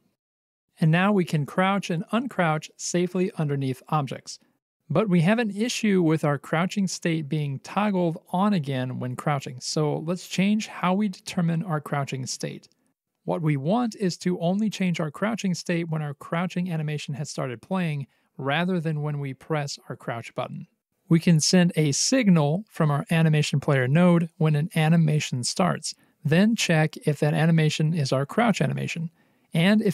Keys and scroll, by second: 1.9 w, 3.4 c, 7.0 w, 21.2 alt+c, 21.9 alt+x, 23.3 alt+x.